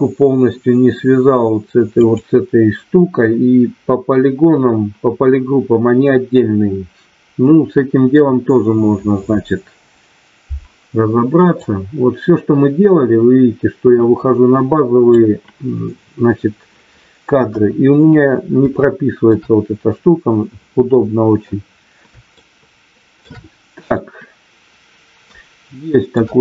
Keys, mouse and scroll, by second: 2.0 click, 11.6-15.1 drag, 17.4 KP_1, 18.7 middle click, 22.3 shift+middle click, 23.9-26.1 shift+middle drag.